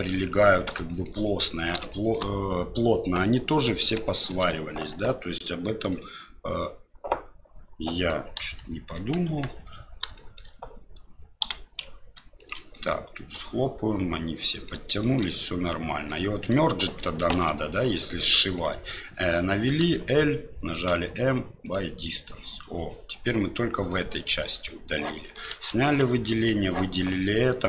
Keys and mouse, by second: 0.9 shift+middle click, 1.9 shift+middle click, 4.0 shift+middle click, 5.9-8.1 middle drag, 8.4 KP_1, 9.2 KP_3, 10.1 shift+middle click, 11.4 g, 12.8 middle click, 14.5 middle click, 15.1 shift+middle click, 16.2 middle click, 17.3 alt+a, 18.3 middle click, 20.8 l, 23.4-25.1 middle drag, 25.5 alt+a.